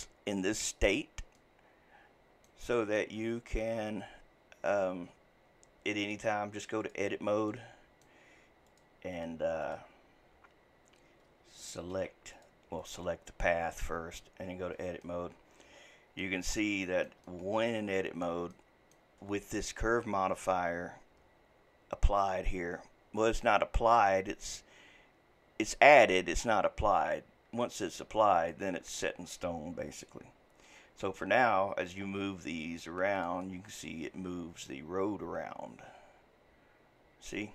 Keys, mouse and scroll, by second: 1.4-3.2 middle drag, 3.2 scroll up 2, 6.0-7.5 drag, 7.5-8.7 middle drag, 8.7 click, 9.2 click, 9.6 click, 12.0 Tab, 12.3 click, 12.8 click, 14.0 Tab, 15.0-21.6 middle drag, 27.8 click, 33.4-36.4 middle drag.